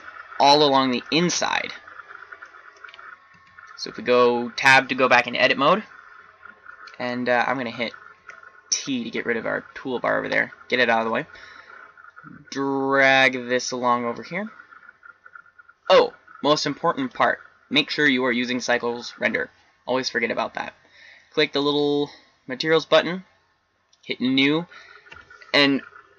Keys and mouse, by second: 3.2 Tab, 8.1 t, 13.0-15.0 middle drag, 16.9-19.5 drag, 21.6-25.8 drag.